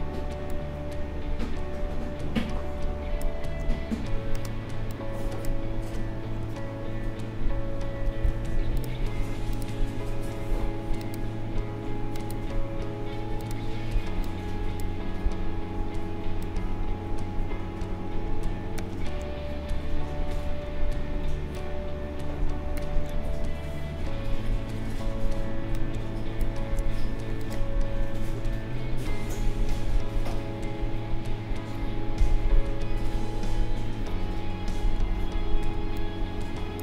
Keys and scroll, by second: 7.8 ctrl+g, 35.7 space.